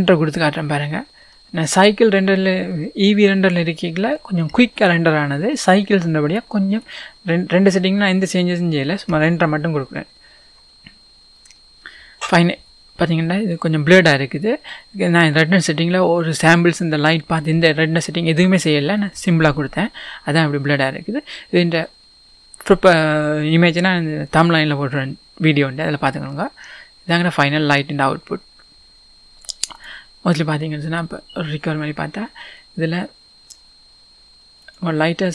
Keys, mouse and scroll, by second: 6.9-9.4 drag, 29.9-34.8 drag.